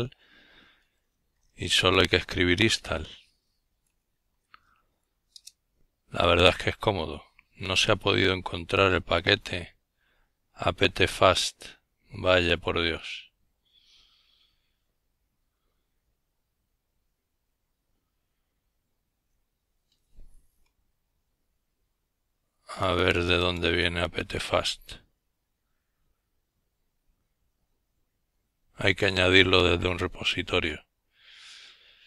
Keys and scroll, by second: 0.0-2.3 typing.